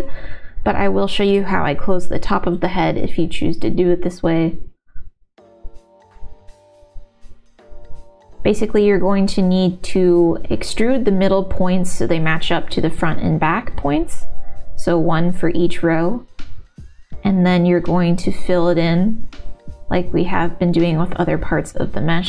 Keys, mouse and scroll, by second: 0.0 ctrl+z, 0.1 middle click, 0.3 g, 0.6 click, 0.8 g, 1.2 g, 2.0 middle click, 2.6 ctrl+s, 2.8 middle click, 2.9 middle click, 3.1 click, 3.7 middle click, 4.2 s, 4.4 click, 5.0 g, 5.1 shift+middle click, 5.4 ctrl+s, 5.4 middle click, 5.9 shift+middle click, 6.3 middle click, 6.7 g, 7.1 middle click, 7.3 shift+middle click, 7.6 middle click, 7.8 middle click, 8.0 middle click, 8.7 middle click, 9.9 middle click, 10.1 e, 13.2-14.2 middle drag, 14.3 g, 15.4 g, 15.8 middle click, 16.5 middle click, 17.4 middle click, 19.1 f, 20.4 middle click, 21.3-22.2 middle drag.